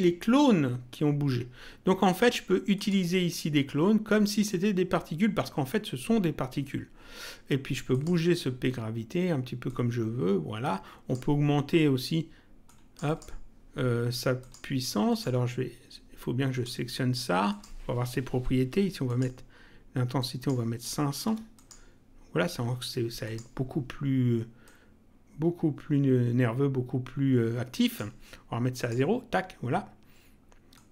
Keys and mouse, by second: 2.7 click, 7.9 click, 9.7 click, 12.6 click, 14.3 click, 16.4 click, 19.0 click, 20.2 click, 21.5 click, 23.2 click, 24.6 click, 28.7 click, 30.7 click.